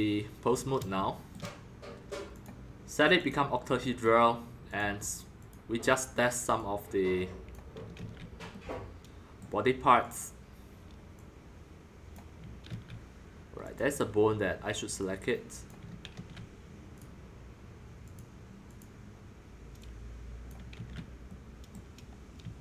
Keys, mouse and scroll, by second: 2.4-3.8 drag, 3.8-4.4 middle drag, 4.4-4.8 scroll up 3, 4.8-6.5 drag, 7.5 click, 7.9 ctrl+z, 9.4 middle click, 10.1-12.6 drag, 12.6 ctrl+z, 13.6 click, 13.7 click, 15.0 click, 16.1 ctrl+z, 17.0 click, 18.0 click, 18.6 click, 19.7 click, 20.7 ctrl+z, 21.2 middle click, 21.7-22.6 middle drag.